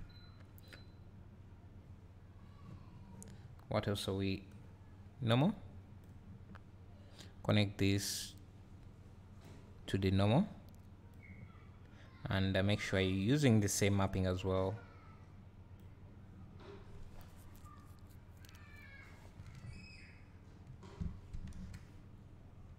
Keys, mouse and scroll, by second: 8.1-22.7 drag, 13.9-14.4 scroll down 1, 21.6 KP_0.